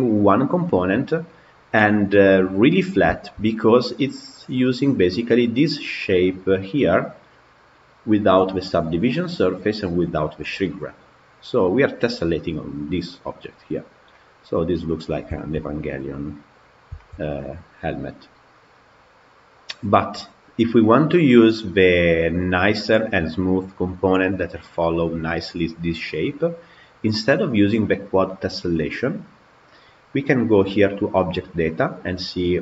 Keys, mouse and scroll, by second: 0.8 scroll down 4, 1.1-2.1 middle drag, 2.1 scroll down 1, 2.8 scroll down 1, 2.9-3.5 shift+middle drag, 3.5 click, 5.1 click, 6.3 click, 7.9 click, 8.6-9.0 scroll down 8, 9.9 click, 10.5-13.5 middle drag, 14.0-14.9 middle drag, 14.9-15.2 scroll up 1, 15.2-16.6 shift+middle drag, 16.6 scroll down 3, 16.8-18.4 shift+middle drag, 18.4 click, 19.5 click, 20.6-21.1 middle drag, 21.1 click, 21.5-24.5 scroll up 1, 26.4 click, 29.2 click, 30.8-32.3 drag, 32.3-32.6 scroll down 4.